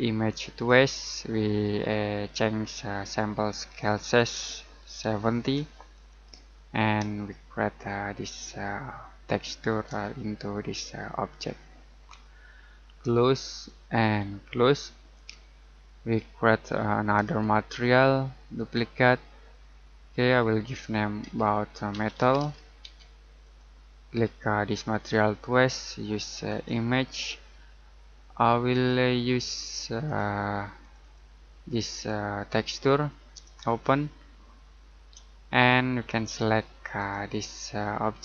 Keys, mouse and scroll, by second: 0.2 click, 3.8 click, 5.0-5.3 typing, 5.9 click, 7.1 shift+middle click, 9.9 middle click, 13.5 click, 17.2 right click, 18.5 click, 21.2-22.9 typing, 23.4 click, 37.0 click.